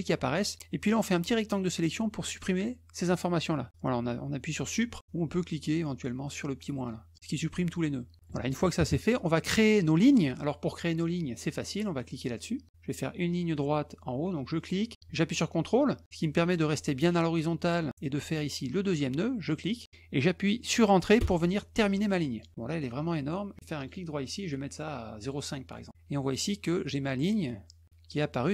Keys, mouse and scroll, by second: 1.0 click, 7.1 click, 9.5 middle click, 10.0 middle click, 14.5 click, 19.4 ctrl+click, 21.1 Return, 23.7 right click, 25.2 click.